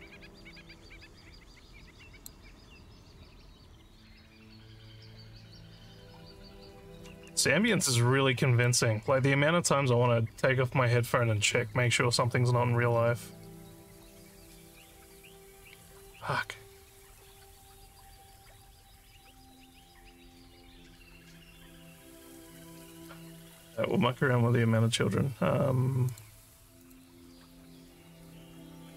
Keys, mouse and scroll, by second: 4.7 scroll down 1, 7.3 alt+middle click, 8.0 alt+click, 13.0 middle click, 13.0 scroll down 3, 24.2 click, 26.1 click, 26.8 click.